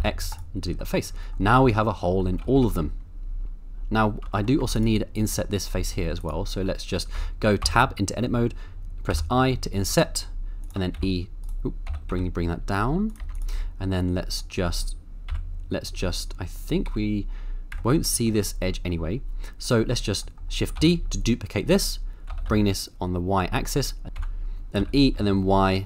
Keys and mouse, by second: 0.8 middle click, 1.6 Tab, 2.3 middle click, 2.4 a, 2.5 a, 2.9-3.4 middle drag, 3.4 ctrl+z, 4.4 shift+middle click, 4.6 Tab, 4.7 click, 5.3 Tab, 5.8 3, 7.2 Tab, 7.6 Tab, 9.1 i, 9.3 u, 10.6 shift+click, 11.0 e, 11.4 right click, 11.9 g, 12.1 z, 13.1 click, 13.2 Tab, 13.5 Tab, 14.5 middle click, 15.3 KP_7, 16.9 z, 18.0 middle click, 18.5 middle click, 20.2 middle click, 20.8 shift+d, 21.7 right click, 22.3 g, 22.5 y, 23.8 click, 24.1 2, 24.8 e, 25.2 y.